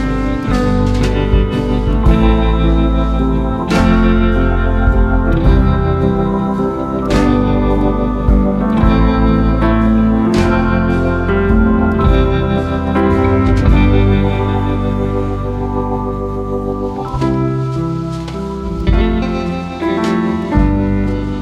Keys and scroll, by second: 4.9 ctrl+a, 5.2 ctrl+c, 6.1 ctrl+v, 9.4 ctrl+a, 9.7 ctrl+c, 10.4 ctrl+v, 13.3 ctrl+a, 13.7 ctrl+c, 14.4 ctrl+v, 18.0 ctrl+a, 18.5 ctrl+c, 19.3 ctrl+v.